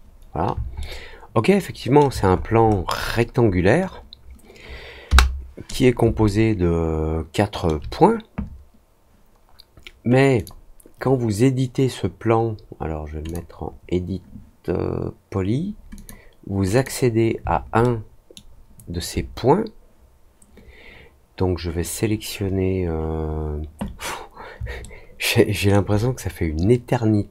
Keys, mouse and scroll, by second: 0.7-1.9 alt+middle drag, 2.3-2.7 scroll up 2, 2.9 scroll down 1, 3.0 scroll up 1, 3.4 scroll down 1, 6.2-7.6 alt+middle drag, 10.3 click, 13.2 click, 15.9 click, 16.7 click, 17.7-25.6 alt+middle drag.